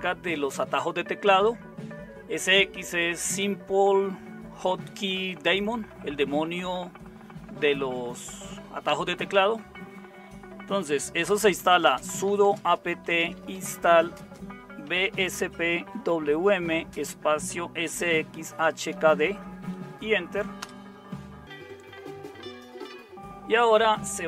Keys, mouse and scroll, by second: 11.2-18.9 typing, 20.6 typing.